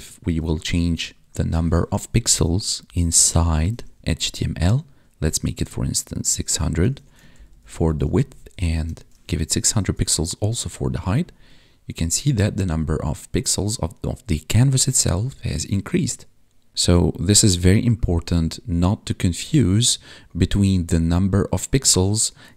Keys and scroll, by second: 2.8 Left, 6.9 ctrl+s, 7.3 ctrl+Right, 8.5 Right, 9.8 ctrl+s, 16.7 alt+Tab.